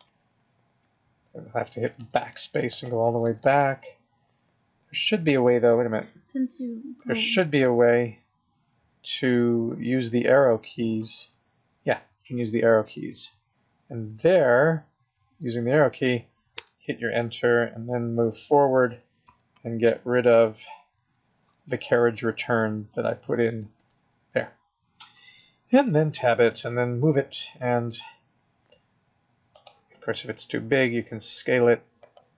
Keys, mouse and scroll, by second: 0.0 Return, 0.8 Return, 1.8-3.6 typing, 2.8 click, 6.5 r, 7.0 l, 7.7 d, 9.2 ., 10.4-11.2 Left, 11.3-13.3 Left, 14.3 Right, 14.8 Right, 15.3 Right, 16.5 Return, 18.5 Right, 18.7 Right, 19.0 Right, 19.2 Right, 19.5 Right, 19.8 Right, 20.0 Right, 20.2 Right, 20.4 Right, 20.6 Right, 20.8 Right, 20.9 Right, 22.1 Left, 22.3 Left, 22.4 Left, 22.7 Left, 23.7 BackSpace, 25.8 Tab, 27.1 g, 30.7 s.